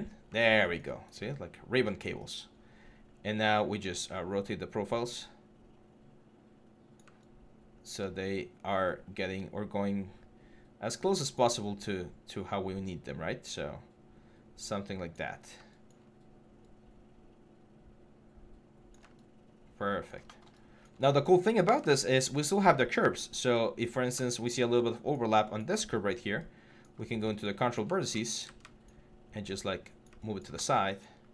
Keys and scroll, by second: 21.4 4, 23.0 6, 24.4 4, 26.8 6, 28.1 w, 30.9 4.